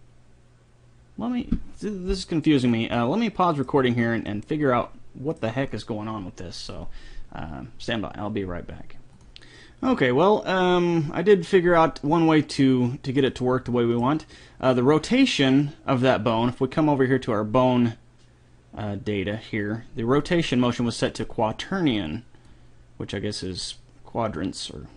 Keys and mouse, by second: 3.0-5.5 middle drag, 13.5 middle click, 20.5-22.0 drag, 24.6 click.